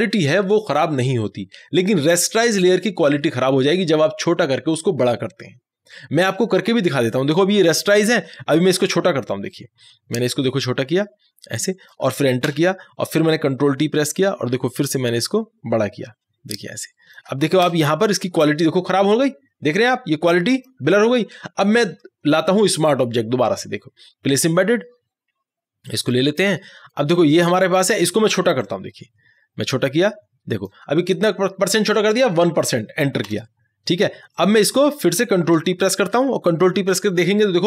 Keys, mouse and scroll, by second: 9.5 ctrl+t, 9.6-12.5 drag, 12.5 Return, 15.0-17.6 drag, 17.6 Return, 19.8-23.0 drag, 28.6-33.2 drag, 33.3 Return, 34.4-36.2 drag, 36.2 ctrl+t.